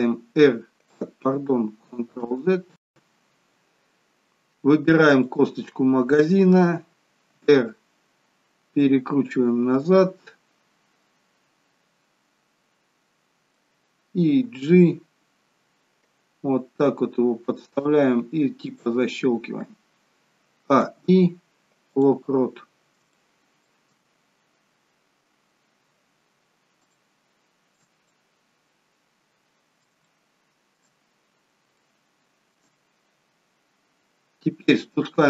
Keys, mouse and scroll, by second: 0.0 r, 3.1 ctrl+z, 5.1 click, 7.2 r, 9.8 middle click, 23.1 shift+middle click, 26.7 scroll down 3, 26.9 shift+middle click, 28.1 middle click, 30.0 middle click, 31.1 scroll up 7, 31.8 shift+middle click, 32.7 scroll down 1, 34.7 scroll down 1.